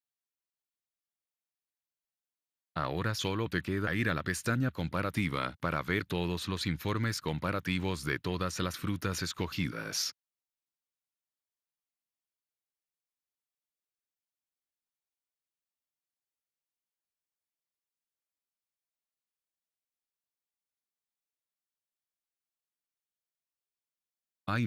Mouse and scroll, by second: 5.6 click.